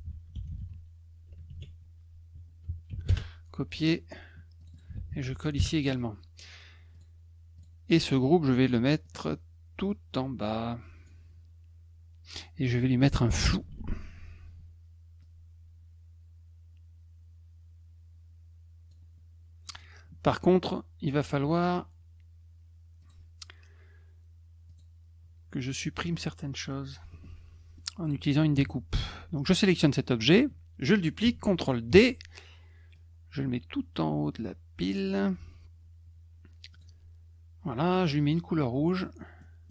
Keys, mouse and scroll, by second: 0.0-1.1 typing, 1.5 ctrl+a, 2.9 ctrl+c, 3.1 Return, 4.6 click, 4.7 click, 4.9 ctrl+v, 5.5 Return, 6.9 click, 7.6 click, 9.0 click, 9.9-11.0 drag, 13.6 ctrl+shift+f, 15.2-18.9 drag, 23.0 click, 24.7 click, 27.8 middle click, 29.7 click, 31.9 ctrl+d, 32.9-35.0 drag, 36.7 click, 38.9 middle click, 39.4 middle click.